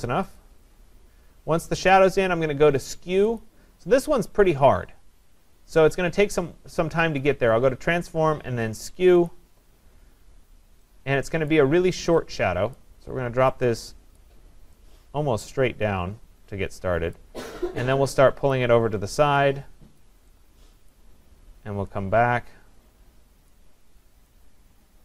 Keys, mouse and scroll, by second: 0.4 click, 3.5 click, 9.3 click, 11.5 click, 12.8 click, 14.2 click, 20.9 click, 23.5 click.